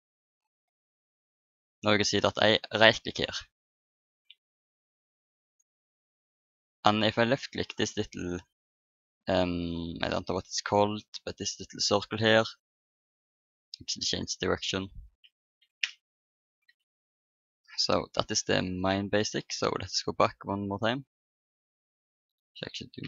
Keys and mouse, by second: 1.4 n, 3.0 click, 3.6 middle click, 4.7 Escape, 5.5-10.1 drag, 6.6 right click, 12.2-15.6 drag, 14.1 right click, 15.6 ctrl+n, 19.0 n, 22.8 ctrl+n.